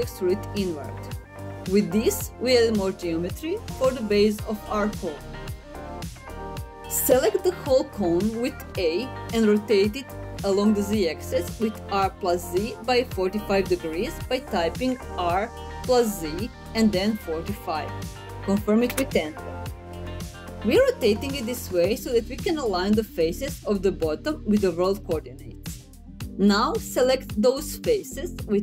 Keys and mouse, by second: 3.2 click, 3.6 middle click, 7.8 a, 14.0 r, 15.5 z, 16.6 KP_4, 16.9 KP_5, 18.0 Return.